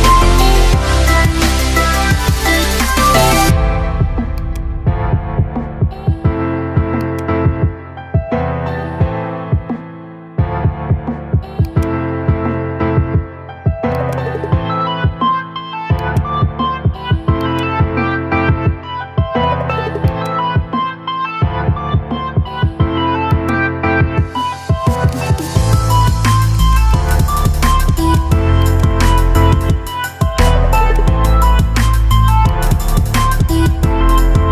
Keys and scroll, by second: 29.3 Delete.